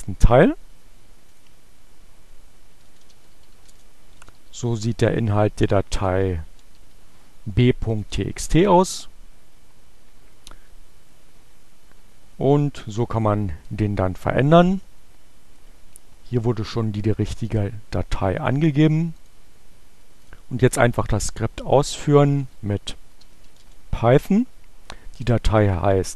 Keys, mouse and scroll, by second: 0.9 click, 1.9-6.7 typing, 7.4 Return, 17.5 click, 18.9 click, 20.2 click, 20.9 click, 22.2-25.9 typing.